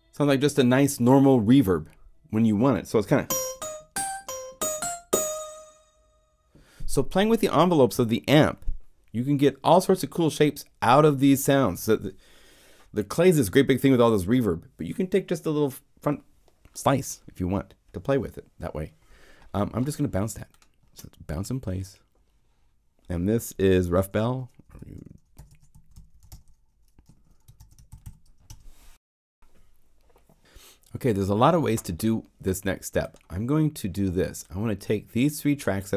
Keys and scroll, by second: 23.9-28.3 typing, 28.4 Return.